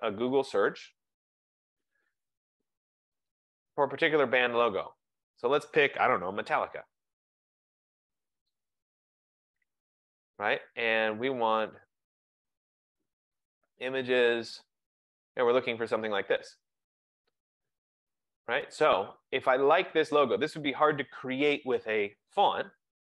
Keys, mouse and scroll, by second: 0.8 click, 2.1-3.8 typing, 5.7 click, 5.7-9.0 typing, 12.8-13.5 typing, 13.0 click, 16.2 click, 19.0 click.